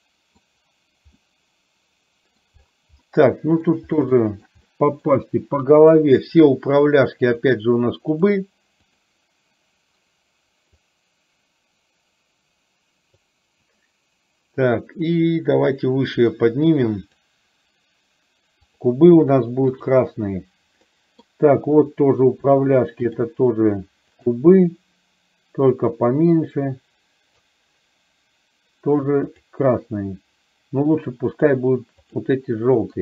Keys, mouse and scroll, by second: 1.3-2.5 middle drag, 3.0-3.8 middle drag, 4.1-4.6 shift+middle drag, 4.8 middle click, 5.9 click, 7.5 click, 10.9-13.3 drag, 15.4-17.3 drag, 21.0 middle click, 22.0 click, 23.0 shift+click, 24.3 click, 25.9-27.5 drag, 29.4 click, 32.1 click.